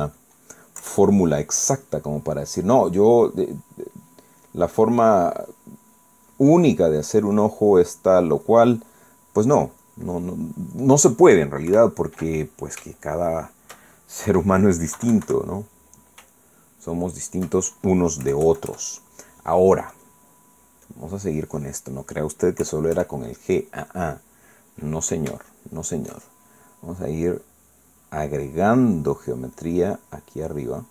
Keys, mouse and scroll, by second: 1.8 KP_Add, 3.1 click, 3.9 click, 4.6 click, 6.0 click, 6.5 middle click, 8.0 click, 9.2 click, 10.0 click, 10.5 click, 11.0 click, 11.2 click, 11.5 middle click, 12.1 scroll up 1, 12.2 middle click, 12.7 KP_1, 13.6 shift+middle click, 14.2-14.8 shift+scroll up 1, 15.6 KP_1, 16.0 KP_Decimal, 17.3-18.5 shift+middle drag, 19.2 KP_Add, 20.9 click, 21.9 click, 23.6 KP_Add, 24.5-25.9 middle drag, 26.5-27.6 shift+middle drag, 28.2-29.6 drag, 30.1 click.